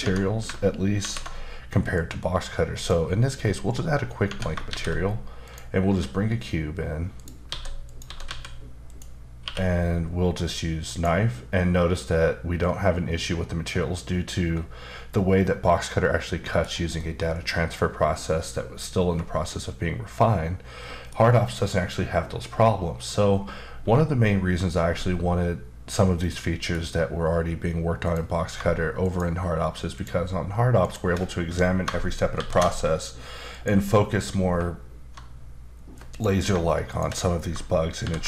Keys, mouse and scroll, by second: 0.0 Tab, 1.0 alt+m, 1.9 click, 4.2 Tab, 4.7 shift+a, 5.4 click, 5.8 s, 7.2 click, 7.5-8.2 typing, 7.8 click, 8.9 click, 9.4 q, 10.9 click, 11.9 middle click, 17.0 middle click, 18.1 middle click, 26.2 middle click, 28.0 click, 29.0 shift+click, 29.9 shift+double click, 30.8 shift+click, 32.3 ctrl+shift+b, 33.5 click, 36.1 click, 36.9 shift+click, 38.0 ctrl+shift+b.